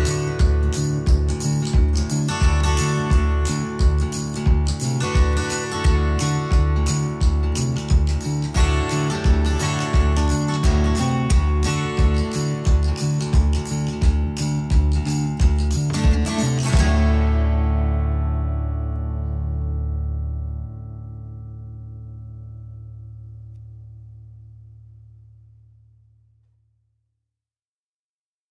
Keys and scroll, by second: 1.0 Right, 2.1 Left, 2.9 Left, 8.6 Left, 11.2 Right, 23.9 3, 24.2 /, 24.4 Return, 24.7 space.